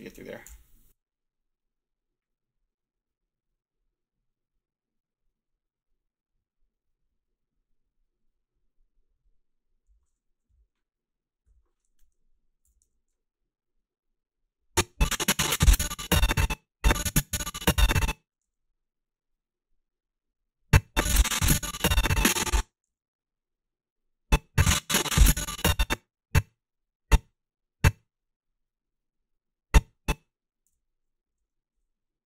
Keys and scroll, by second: 0.4 f, 11.5-13.3 typing, 18.5 s, 22.9 s, 30.7 g, 31.2 a.